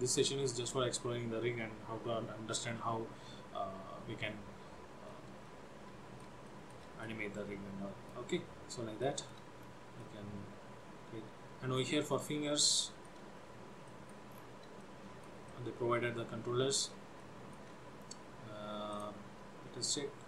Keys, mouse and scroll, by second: 5.3 middle click, 6.6 shift+middle click, 7.2 middle click, 8.5-9.0 scroll up 2, 9.1 shift+middle click, 9.8-10.1 scroll down 1, 10.1 middle click, 12.3-12.7 scroll up 1, 12.9 shift+middle click, 13.5 scroll up 1, 13.9 middle click, 14.5-14.9 scroll down 3, 15.0 shift+middle click, 15.6 middle click, 17.2 shift+middle click, 19.0 click, 19.5 scroll up 1.